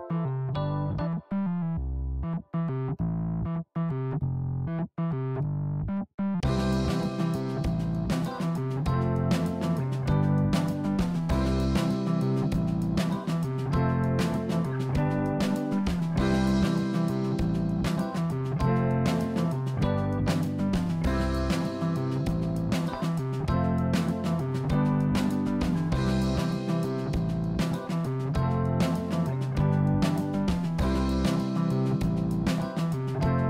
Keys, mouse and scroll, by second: 1.7 click, 3.1 e, 7.9 e, 11.8-13.5 middle drag, 15.1 KP_1, 16.3 e, 26.7-27.3 scroll up 1, 27.3-28.9 drag, 28.9 r, 33.2 g.